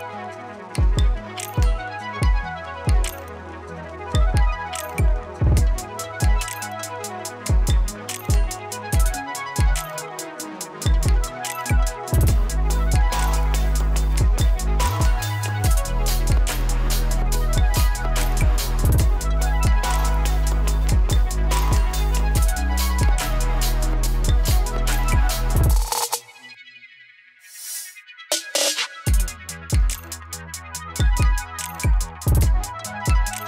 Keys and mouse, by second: 1.1 ctrl+d, 1.5-4.7 drag, 4.7 space, 6.1-7.4 drag, 7.4 space, 10.0 click, 10.4 space, 13.9 space, 15.6-18.5 drag, 21.1-28.5 ctrl+drag, 29.9 space, 32.0 space, 32.6 click, 33.0 space.